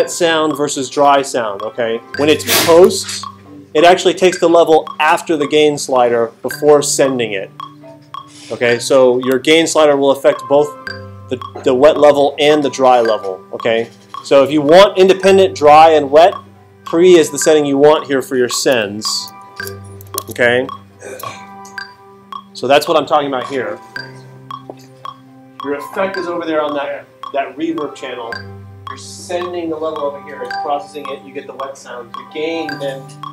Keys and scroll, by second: 19.3 alt+super+8, 20.2 alt+super+Tab, 20.7 super+Tab.